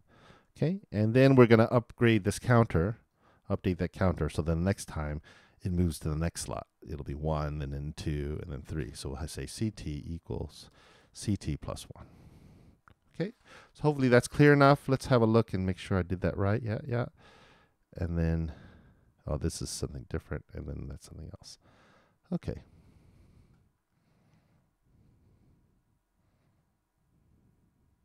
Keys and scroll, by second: 12.1 shift+t, 12.3 shift+=, 12.9 shift+|.